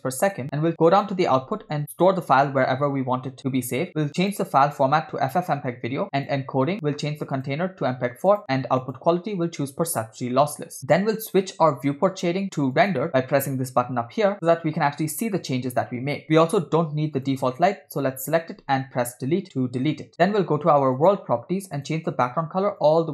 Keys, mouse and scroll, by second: 0.9-2.2 drag, 1.8 /, 3.0-3.9 scroll down 3, 4.2-5.5 drag, 6.2 click, 6.6 scroll down 2, 7.4-8.4 drag, 8.8-10.1 drag, 10.8 middle click, 10.8 scroll down 2, 17.2-17.5 drag, 19.2 Delete, 21.0 click, 21.8 click.